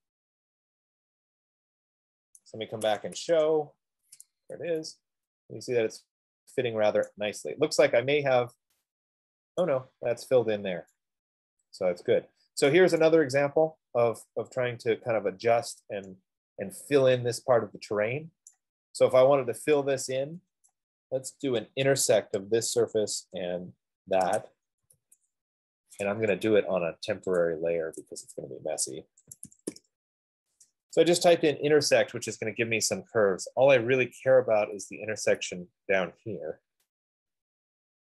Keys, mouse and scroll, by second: 2.4-3.6 typing, 2.6 right click, 5.0 Escape, 5.2-6.0 typing, 7.4 right click, 8.4-8.8 scroll, 9.2 middle click, 10.0 right click, 13.0 right click, 14.4 right click, 18.7 right click, 19.9 F15, 21.0 right click, 21.9 click, 23.8 shift+click, 24.3 typing, 25.4 n, 26.5 Escape, 27.7 click, 29.6-32.0 typing, 34.3 Return, 34.3 typing.